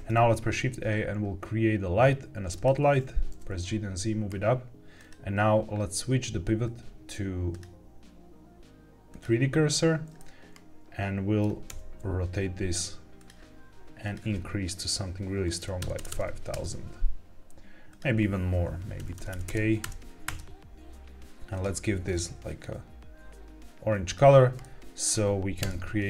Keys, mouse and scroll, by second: 0.1 shift+a, 3.2 g, 3.4 z, 4.9 click, 7.4-9.2 drag, 10.3-11.3 middle drag, 11.6 r, 13.1 click, 13.9-16.5 drag, 15.9 KP_0, 16.0 KP_0, 17.8-20.2 drag, 19.2 KP_0, 19.4 KP_0, 21.4 click, 24.5-24.9 middle drag, 25.5 KP_0.